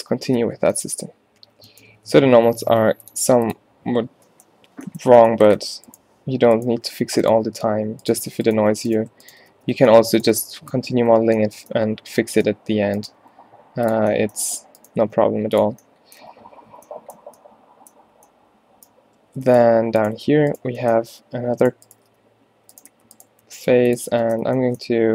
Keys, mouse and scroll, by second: 0.5 ctrl+n, 1.0 a, 1.5 a, 2.4 ctrl+n, 6.9 shift+f, 7.6 f, 8.8-11.4 typing, 13.2 g, 15.1 g, 16.3 a, 16.7 a, 18.2 a, 19.7 z, 21.3 z, 22.3 g, 23.0 f, 23.4 g, 24.5 z.